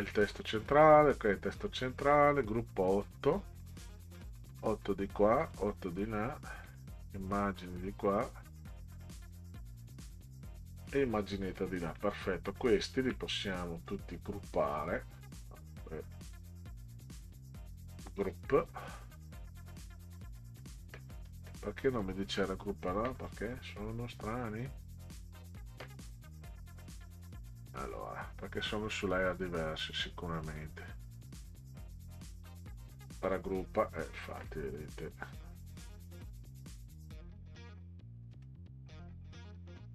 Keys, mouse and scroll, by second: 0.6 click, 2.0 click, 4.1 click, 5.4 click, 6.7 click, 9.3 click, 11.8 click, 12.8 shift+click, 13.9 right click, 17.2 right click, 27.0 click, 27.8-30.0 drag, 31.6 right click, 33.2 click, 38.3 right click.